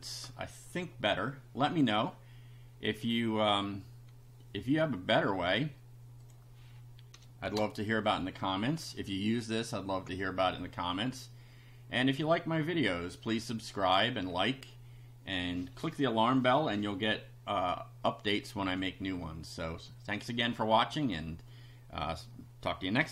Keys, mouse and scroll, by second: 6.2 click, 7.5 shift+0, 13.2 click, 13.8 click.